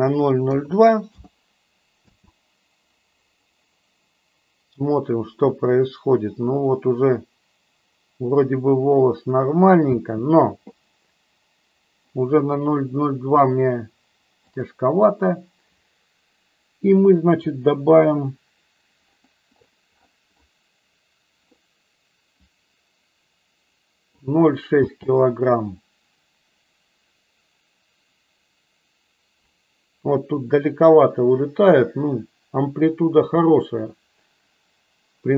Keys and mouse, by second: 1.9 space, 11.3 space, 14.7 click, 22.5-24.1 drag, 24.7 space.